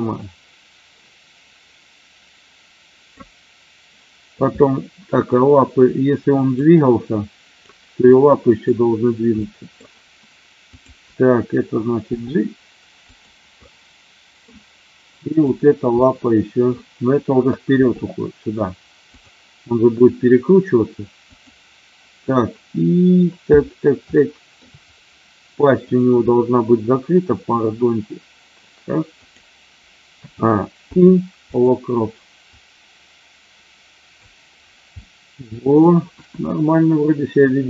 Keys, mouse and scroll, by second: 6.6 click, 8.0 middle click, 9.3 middle click, 10.6 click, 13.6-14.3 middle drag, 14.3 scroll down 1, 15.2-15.7 drag, 15.8-16.6 middle drag, 17.8 g, 19.0 click, 24.1-24.6 shift+middle drag, 25.9-26.3 drag, 27.4 r, 29.1 click, 30.3 a, 30.8 i, 32.5-34.1 drag, 35.0-35.8 middle drag.